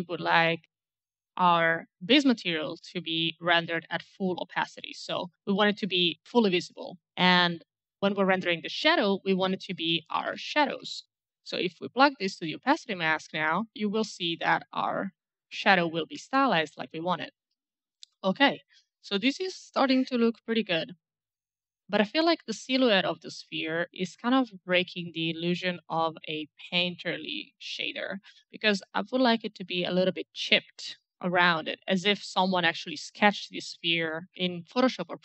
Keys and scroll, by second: 0.7 1, 9.8-11.1 typing.